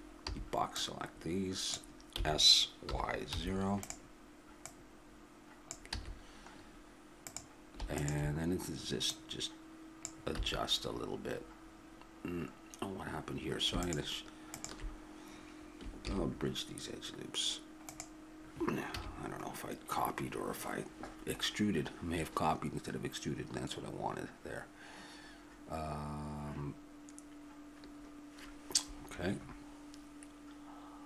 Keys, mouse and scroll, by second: 0.3 b, 2.2 s, 4.7-6.0 drag, 6.0 a, 6.6 middle click, 7.3-9.1 drag, 10.4 a, 12.8-13.8 middle drag, 13.8-16.1 drag, 16.1 ctrl+e, 19.0 a, 19.1-22.1 middle drag.